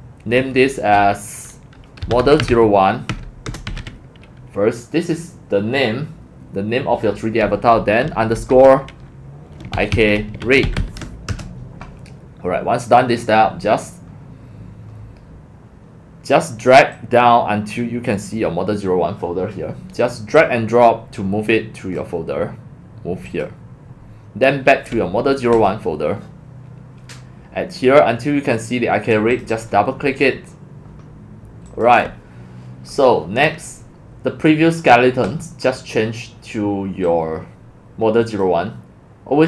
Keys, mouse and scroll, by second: 1.8-5.2 typing, 9.4-11.3 typing, 11.3 Return, 16.1 typing, 16.9-17.8 drag, 20.4-22.0 drag, 29.6 click, 31.8 click, 35.3 click, 37.1-38.4 drag.